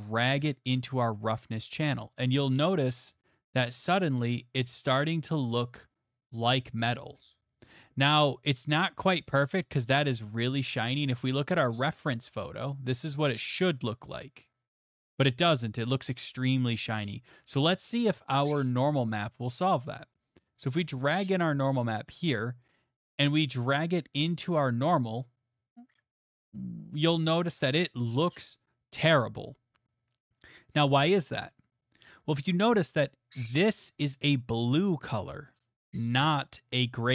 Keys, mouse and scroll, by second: 3.9 click, 6.4 middle click, 7.6 middle click, 10.1 middle click, 11.4 click, 13.9 click, 15.7 click, 18.0 middle click, 20.0 click, 20.3 middle click, 21.6 click, 22.2 click, 23.2 middle click, 25.2 click, 28.5 middle click, 37.0 middle click.